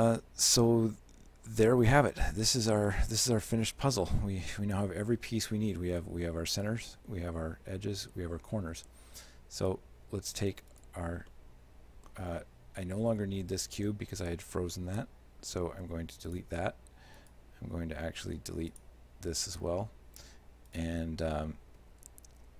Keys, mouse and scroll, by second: 2.3 middle click, 2.8 scroll down 2, 2.9 middle click, 3.7 shift+middle click, 6.0 right click, 6.6 shift+right click, 9.6 right click, 10.8 shift+right click, 11.4 shift+middle click, 12.8 right click, 15.8 x, 17.2 right click, 18.3 x, 20.7 right click, 22.0 z.